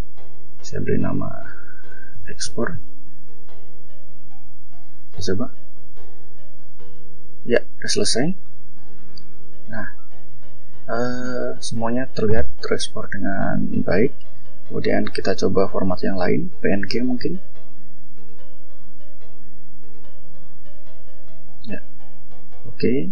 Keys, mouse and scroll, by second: 0.5-2.8 typing, 4.8 click, 7.7 click, 8.7 click, 9.2-9.5 scroll down 2, 9.8 scroll up 2, 10.7 click, 11.1 click, 11.5 click, 11.9 click, 12.3 click, 12.6 click, 13.0 click, 13.4 click, 14.6 click, 16.3 click, 18.6 click, 21.9 scroll down 1.